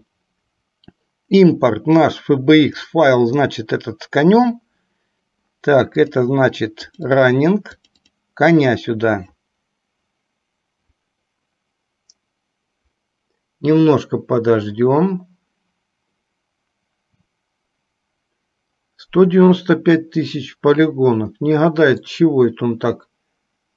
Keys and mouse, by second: 22.5-23.7 middle drag.